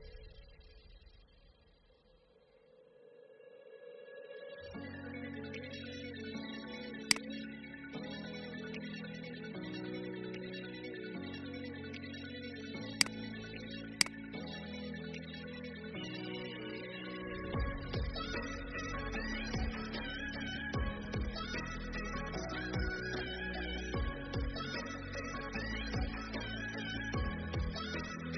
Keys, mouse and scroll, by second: 0.7 ctrl+b, 6.2 v, 7.0 click, 10.2-12.9 scroll down 1, 12.9-16.6 drag, 16.9-17.4 scroll down 1.